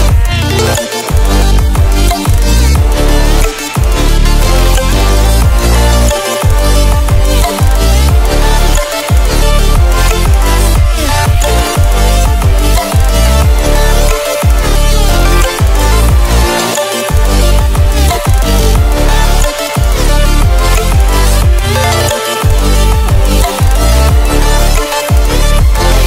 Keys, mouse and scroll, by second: 8.6-10.0 typing, 10.0-13.1 drag, 13.2 click, 13.6 right click, 14.6 click, 15.0 right click, 15.8-21.8 drag.